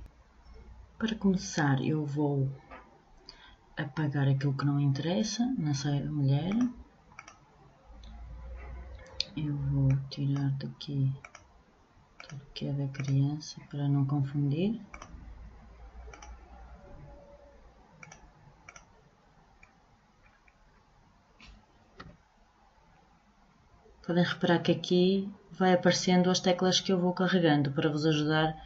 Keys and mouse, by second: 17.6-19.4 drag, 21.2-23.2 middle drag, 21.5 a.